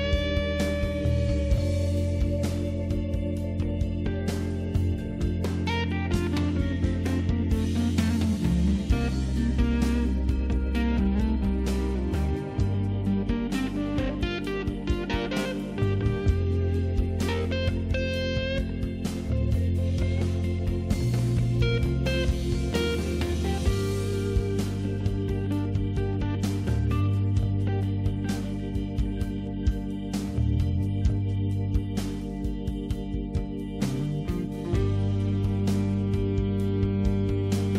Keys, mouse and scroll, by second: 0.1 click, 0.4 scroll up 1, 0.6 scroll down 1, 0.8 scroll up 1, 0.9 click, 11.0 click, 15.2 click, 15.3 click, 15.8 click, 17.8 click, 21.5 click, 32.0 click, 32.6 click, 33.4 click, 36.5-37.4 scroll up 2, 37.4-37.7 scroll down 2.